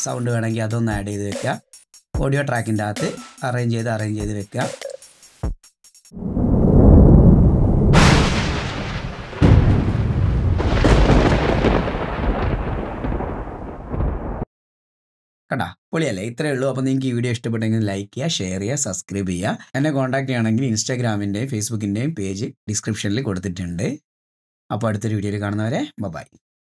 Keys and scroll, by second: 14.4 space.